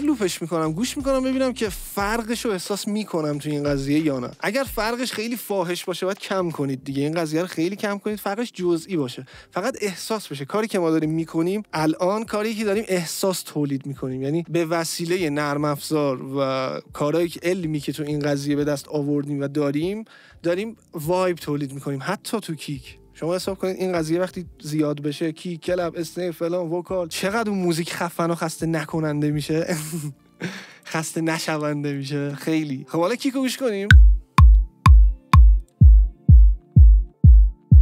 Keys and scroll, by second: 33.5 space.